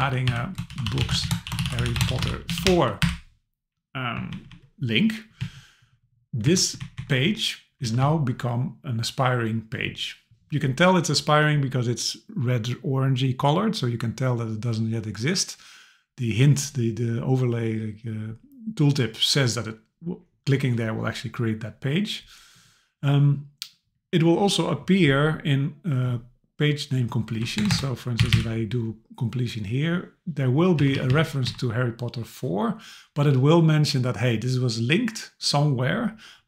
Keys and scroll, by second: 4.3 Left, 5.4 Down, 6.4 Up, 6.8 Left, 7.8 Down, 27.6 Return, 30.8 Down.